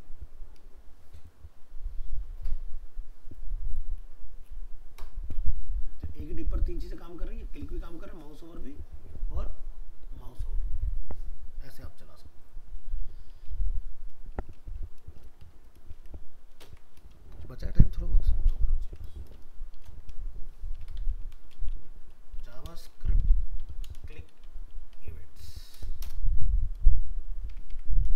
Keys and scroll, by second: 13.4 alt+f, 13.5 alt+移, 15.4 alt+Up, 16.6 ctrl+shift+n.